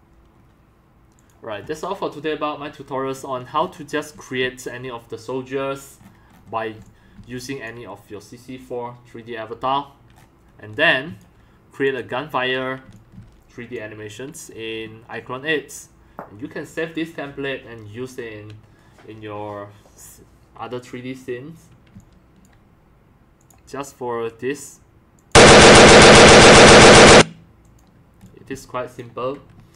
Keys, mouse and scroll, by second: 0.3 scroll up 1, 0.7 drag, 3.2 middle click, 3.2-3.8 scroll down 2, 3.6 middle click, 4.0 middle click, 4.0 scroll up 1, 4.1 x, 4.4 c, 6.0 scroll up 1, 6.8 x, 7.1 c, 10.2 right click, 10.7 x, 11.1 c, 11.5 click, 12.8 x, 12.9-13.7 drag, 13.1 c, 21.9 c, 22.0-22.4 drag, 22.7 click, 23.3 click, 25.1 click, 26.9 click, 27.6 click, 28.2 x, 28.4 c.